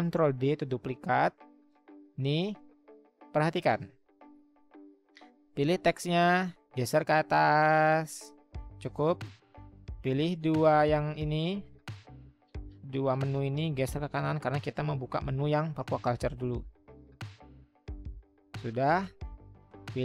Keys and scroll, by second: 0.2 ctrl+d, 7.1-8.2 Up, 11.8-15.0 Right.